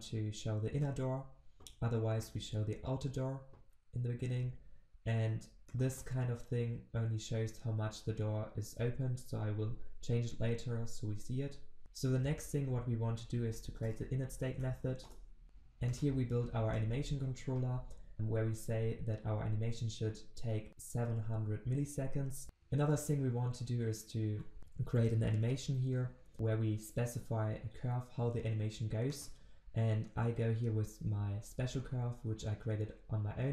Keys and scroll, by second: 15.0 Return.